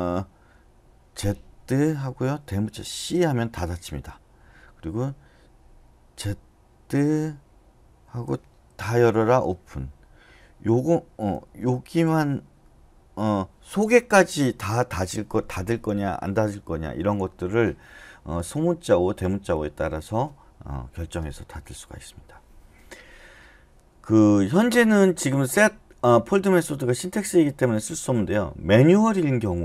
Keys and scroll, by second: 1.7 z, 3.0 shift+c, 8.8-9.5 typing, 11.6 j, 11.9 j.